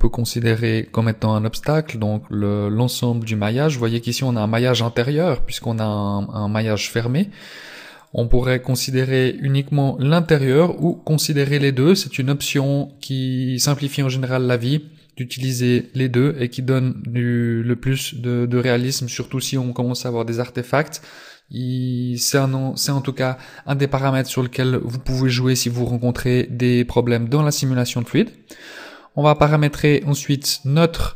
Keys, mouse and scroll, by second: 8.0 click, 10.2 click, 17.5-18.9 scroll up 2, 29.4 right click.